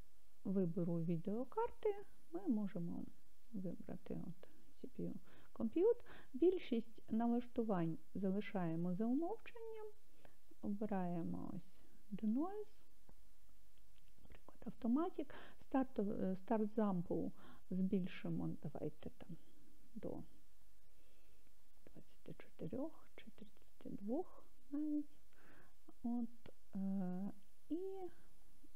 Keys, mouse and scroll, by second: 2.7-3.9 drag, 10.7 click, 12.3-12.9 scroll down 1, 12.9-13.6 scroll down 2, 13.9-14.7 scroll down 1, 17.4-28.7 drag.